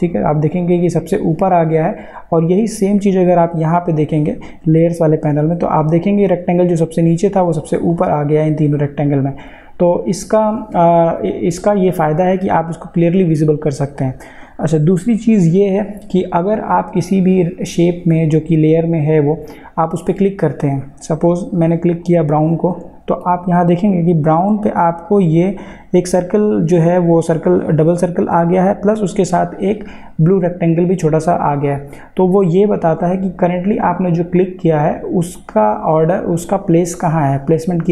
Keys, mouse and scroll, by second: 7.9 click, 14.0 click, 21.9 click, 34.3 click.